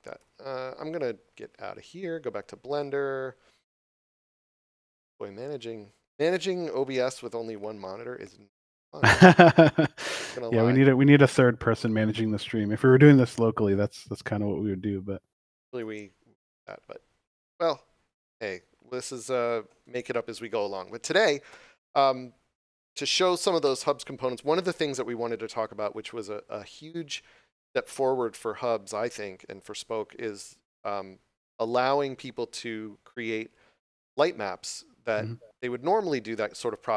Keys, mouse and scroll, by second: 2.6 click, 9.7 click.